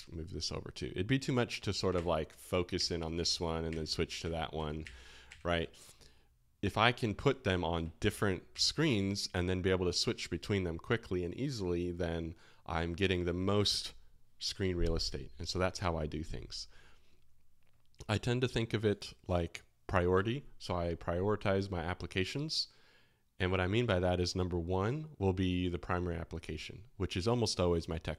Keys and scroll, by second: 1.9 alt+f, 2.7 alt+f, 3.2 alt+k, 3.6 alt+f, 4.2 alt+f, 4.5 alt+h, 4.8 alt+f, 8.2 space, 8.5 [.